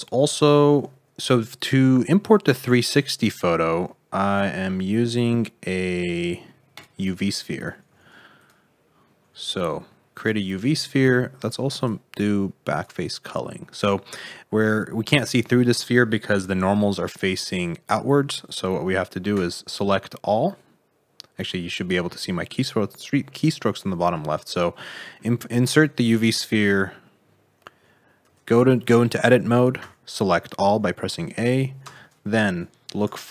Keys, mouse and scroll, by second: 1.0 scroll down 4, 1.4 scroll up 2, 2.0 shift+middle click, 7.7 scroll down 5, 7.8 s, 8.9 scroll down 2, 9.2 s, 10.5 middle click, 11.7 click, 13.4 middle click, 14.2-15.4 scroll down 3, 15.4 middle click, 16.1-16.4 scroll up 2, 16.7 middle click, 17.2 Tab, 18.4 click, 19.3 a, 21.3 middle click, 22.7 middle click, 23.3 click, 24.0 Tab, 24.4 middle click, 25.8 middle click, 28.2 Tab, 29.7 a, 31.8 space.